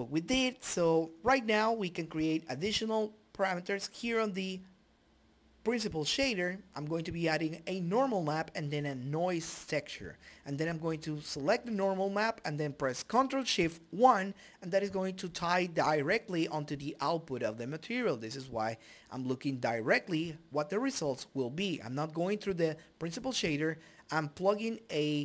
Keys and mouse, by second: 1.0 click, 1.4 click, 1.9-4.3 drag, 4.6-6.5 drag, 8.1-13.8 drag, 13.8-14.8 middle drag, 14.8-17.6 drag, 18.6-21.8 drag, 22.4 click, 22.6 click, 24.7 click, 25.1 Delete.